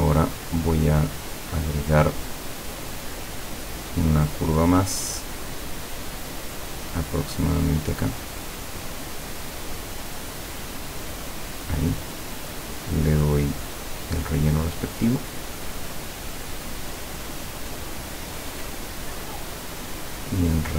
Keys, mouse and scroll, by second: 3.2 click, 7.2 click, 8.6 click, 10.3 click, 11.6 click, 13.5 click, 14.1 click.